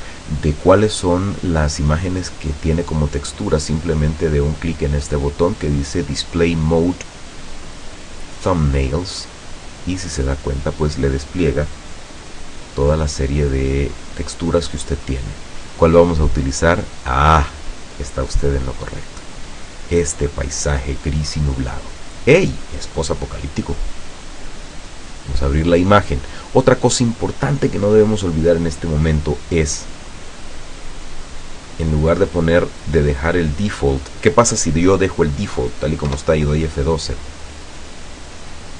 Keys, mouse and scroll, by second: 7.8 click, 13.7 scroll up 1, 14.1-14.6 scroll down 1, 15.0-15.4 scroll down 1, 17.4 click, 25.0 click, 31.6 click, 36.2 F12.